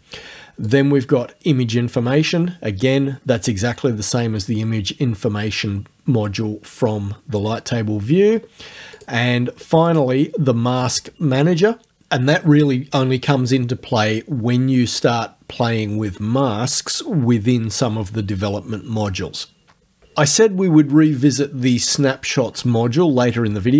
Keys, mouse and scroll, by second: 0.7 click, 9.0 click, 9.9 click, 23.2 click.